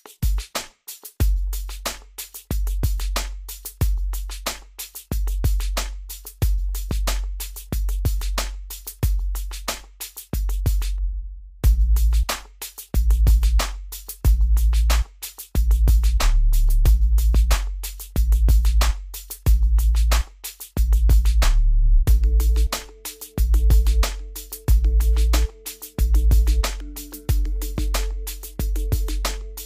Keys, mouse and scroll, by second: 0.9 click, 1.4 scroll down 1, 2.9 click, 5.9 click, 6.2 scroll up 1, 6.4 scroll, 6.5-6.8 scroll down 1, 6.8-7.7 scroll, 9.6 click, 11.9 scroll up 1, 12.1 scroll down 1, 14.9 click, 20.9 scroll up 1, 21.3-23.1 scroll down 1, 24.0 click, 25.7 Escape, 26.3-26.9 scroll up 1, 27.5 click.